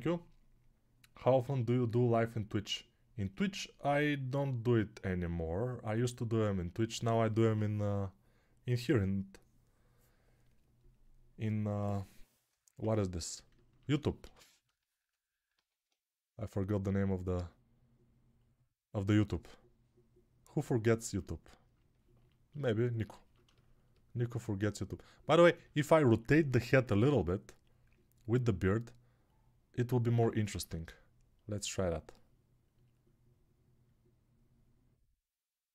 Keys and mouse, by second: 0.0-35.7 typing, 15.7 alt+q, 30.4 ctrl+Tab.